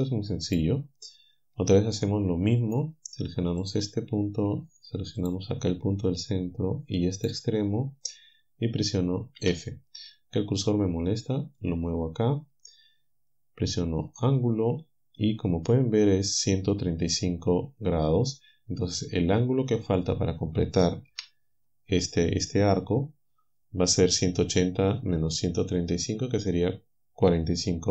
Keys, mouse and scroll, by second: 0.5 alt+click, 2.0 click, 3.7 click, 5.2 shift+right click, 7.1 shift+right click, 9.4 f, 11.6 right click, 14.0 right click, 21.1 KP_7.